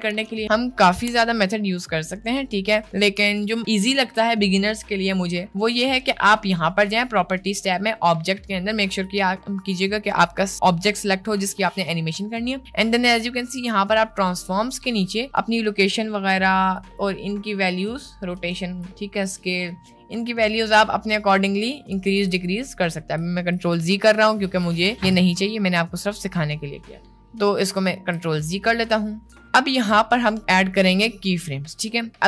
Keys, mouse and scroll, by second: 9.0 click, 16.2 click, 16.8 click, 17.4 click, 17.9 click, 18.4 click, 18.8 click, 19.8 click, 20.3 click, 21.0-21.8 middle drag, 22.0 ctrl+z, 22.1 ctrl+z, 23.7 ctrl+z, 24.1 ctrl+z, 24.6 ctrl+z, 25.0 ctrl+z, 27.0 ctrl+z, 27.9 ctrl+z, 28.6 middle click.